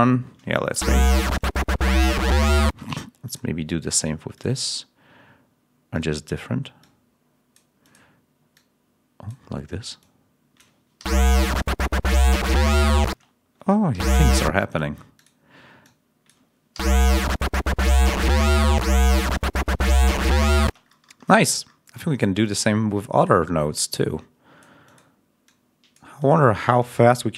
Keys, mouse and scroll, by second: 0.6 l, 2.5 space, 3.1 click, 3.8 click, 4.2 click, 5.8 click, 10.9 l, 13.0 space, 13.8 l, 14.3 space, 15.7 click, 16.6 l, 19.0 scroll down 2, 20.5 space, 21.2 ctrl+scroll up 2, 22.3 click, 23.1 click, 23.6-24.7 drag, 24.7 click, 25.3 click, 26.1 click, 26.7 click.